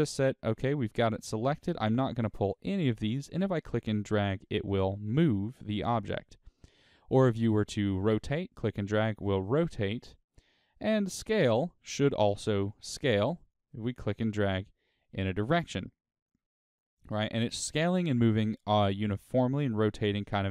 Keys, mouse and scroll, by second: 4.6 right click, 5.6-16.7 drag, 16.7 right click.